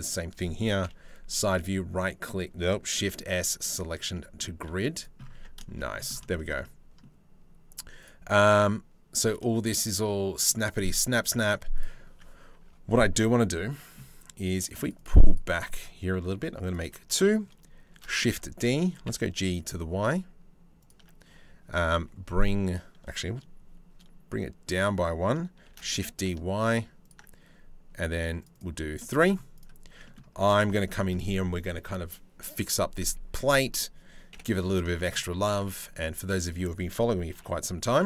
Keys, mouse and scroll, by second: 0.4 KP_3, 1.0 right click, 1.1 click, 1.8 right click, 2.5 shift+s, 3.7 click, 4.3 z, 5.0 Tab, 5.2 shift+middle click, 5.9 shift+middle click, 6.2 middle click, 7.6 click, 9.1 shift+middle click, 10.1 click, 10.9 click, 11.3 click, 11.7 Tab, 12.2 Tab, 14.4 click, 14.9 click, 16.3 click, 17.5 shift+d, 18.6 g, 25.3 shift+d, 28.1 click, 28.6 middle click, 29.2 click, 29.5 Tab, 30.2 shift+middle click, 30.5 middle click, 33.9 KP_7, 34.6 shift+middle click, 35.2 ctrl+r, 36.9 ctrl+b.